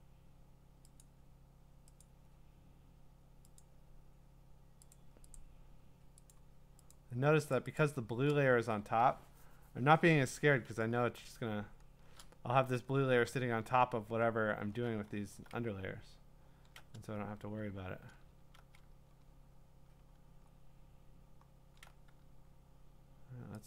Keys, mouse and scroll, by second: 1.0 click, 2.0 click, 3.6 click, 4.9 click, 5.3 click, 6.3 click, 6.9 click, 7.5 click, 7.8 click, 11.6 scroll, 12.6 scroll, 13.1 scroll up 9, 14.1-14.6 scroll up 6, 15.6-16.1 scroll down 9, 18.5-19.4 scroll down 15, 20.5 scroll up 4, 21.4 scroll down 1, 21.7 scroll.